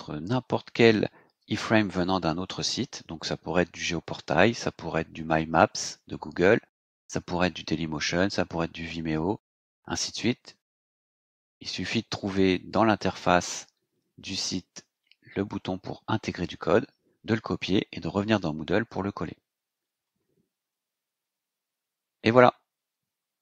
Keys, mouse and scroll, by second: 20.9-21.3 scroll up 2, 21.6 scroll up 2.